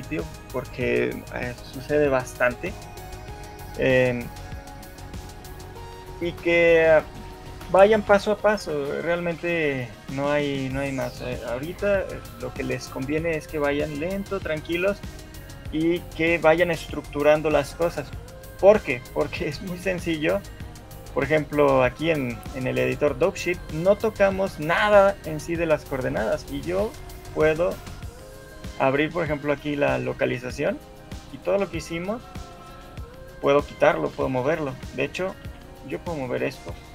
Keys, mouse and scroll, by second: 4.3 shift+middle click, 4.8 shift+middle click, 5.0 middle click, 5.4-5.8 scroll up 3, 5.8 middle click, 6.4 shift+middle click, 7.0 middle click, 7.8 middle click, 9.2 scroll up 1, 9.6 shift+middle click, 10.0 scroll down 2, 10.4 middle click, 23.4 click, 26.2 click, 26.2 middle click, 28.0 click, 35.8 click, 35.8 shift+middle click, 35.8 scroll down 1, 36.2 shift+click.